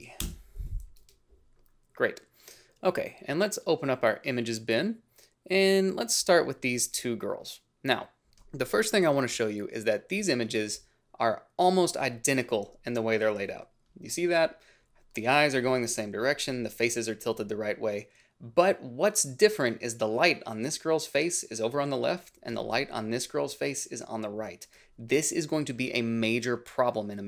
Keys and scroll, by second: 0.0-0.2 typing, 0.1 Return, 24.7 ctrl+z.